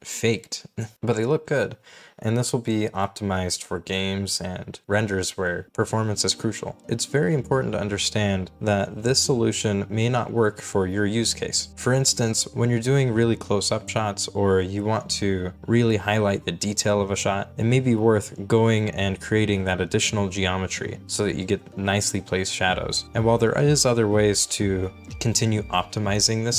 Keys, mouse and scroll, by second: 0.6 middle click, 1.7 scroll down 1, 9.1-9.9 scroll down 1, 11.2-11.6 scroll up 1, 12.3 right click, 13.2-17.4 typing, 18.8 right click, 19.4-21.5 typing.